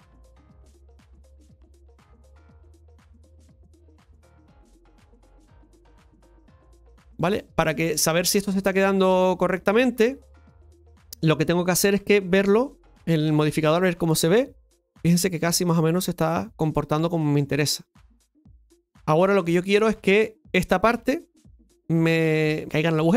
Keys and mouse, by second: 0.7 right click, 1.2 middle click, 2.0-3.8 drag, 4.6 right click, 5.4 click, 6.8-8.7 middle drag, 9.6-10.7 middle drag, 12.4 click, 13.2 Tab, 13.6 middle click, 18.1 middle click, 18.9-20.6 middle drag, 22.8 Tab.